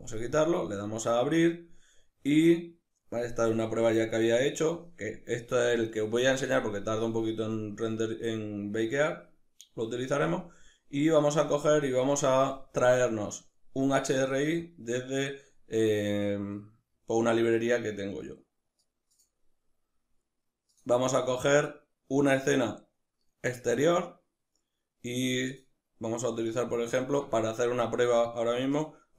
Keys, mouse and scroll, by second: 0.3-29.1 drag.